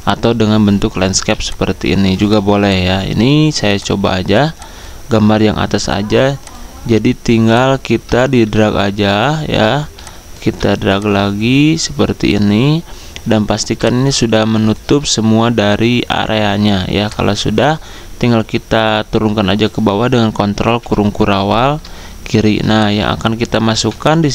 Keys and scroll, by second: 5.8 Delete, 9.8 z, 11.6-12.4 typing, 24.2-24.3 typing.